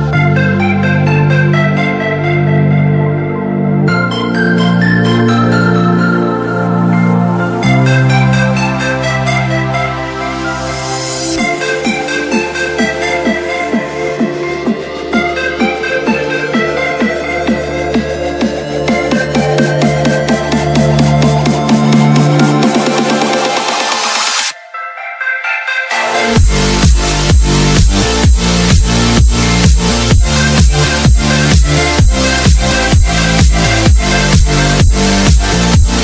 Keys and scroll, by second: 0.4 alt+c, 4.5 Escape, 5.3 shift+F2, 5.7 F3, 14.9 Escape, 24.9 alt+c, 27.3 Escape, 31.7 space, 32.2 Escape, 35.4 shift+F2.